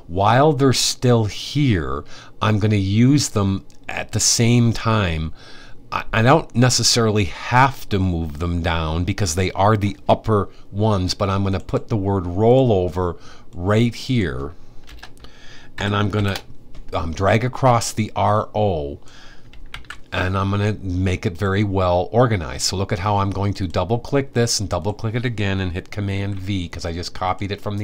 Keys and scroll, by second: 15.2-16.3 typing, 19.3 super+c, 25.8 super+v.